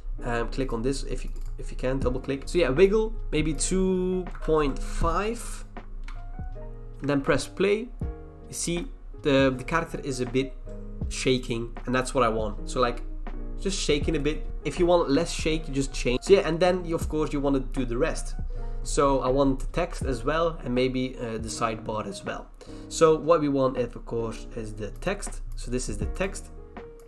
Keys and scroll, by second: 0.0-0.5 typing, 4.3 BackSpace, 6.0 Return.